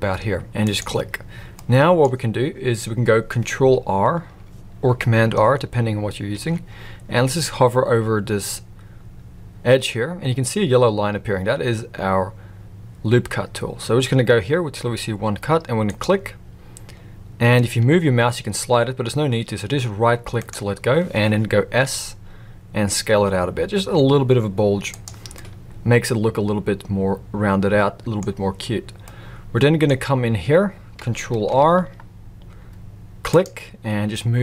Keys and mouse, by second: 1.5 middle click, 6.3 ctrl+r, 21.8 s, 25.3-28.2 middle drag, 29.0 middle click, 31.4 ctrl+r.